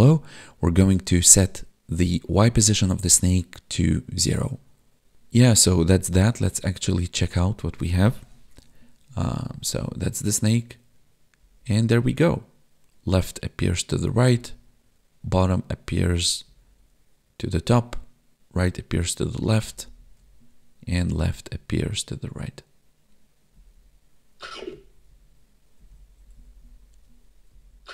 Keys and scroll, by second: 5.1 Tab, 6.5 Tab, 9.5 Up, 11.4 Left, 14.2 Down, 16.5 Right, 19.4 Left, 19.6 Up, 19.8 Left, 23.5 Up, 24.4 Right, 24.7 Down, 25.1 Left, 25.8 Down, 25.9 Left, 26.2 Down, 26.3 Left, 26.5 Down, 27.5 Left.